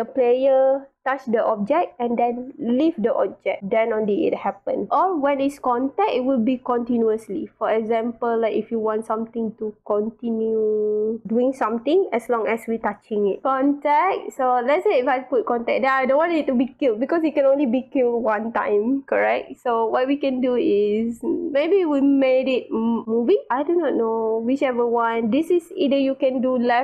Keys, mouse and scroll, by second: 14.6 click, 16.0 click, 20.8 click.